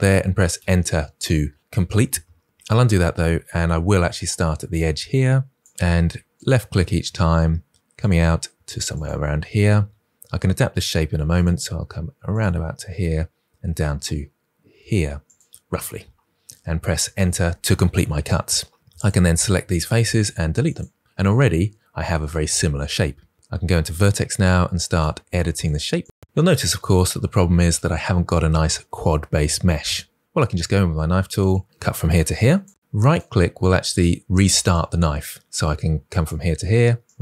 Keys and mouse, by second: 0.4 Return, 2.4 ctrl+z, 3.6 k, 5.6 click, 6.6 click, 7.2 click, 8.5 click, 9.2 click, 11.2 click, 12.2 click, 15.1 click, 17.0 Return, 19.9 Delete, 23.5-25.6 typing, 24.2 click, 25.3 click, 26.1 click, 30.2 k, 31.0 click, 32.1 click, 32.9 right click, 34.5 click, 36.0 click, 36.9 right click.